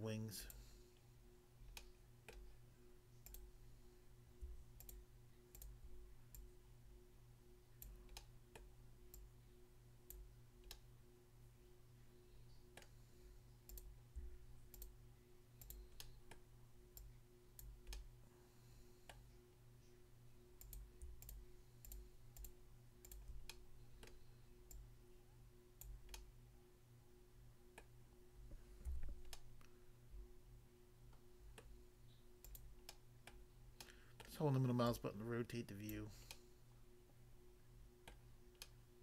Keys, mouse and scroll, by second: 0.4 click, 0.5 click, 1.8 middle click, 2.3 middle click, 3.2 click, 3.4 click, 4.8 shift+click, 5.5 shift+click, 5.6 shift+click, 6.3 shift+click, 7.8 click, 8.1 middle click, 8.6 middle click, 10.2 click, 10.7 middle click, 12.8 middle click, 13.7 click, 13.8 click, 14.8 shift+click, 15.6 shift+click, 15.8 shift+click, 16.0 middle click, 16.3 middle click, 17.0 click, 17.6 click, 17.9 middle click, 19.1 middle click, 20.6 click, 20.8 click, 21.2 shift+click, 21.4 shift+click, 21.8 shift+click, 22.4 shift+double click, 23.1 shift+click, 23.5 middle click, 24.0 middle click, 24.7 click, 25.9 click, 26.1 middle click, 27.8 middle click, 28.8 a, 29.3 middle click, 31.7 middle click, 32.5 click, 32.6 click, 33.0 middle click, 33.3 middle click, 33.8 middle click, 34.3 middle click, 34.9 click, 36.0 click, 36.4 middle click, 38.1 middle click, 38.6 middle click.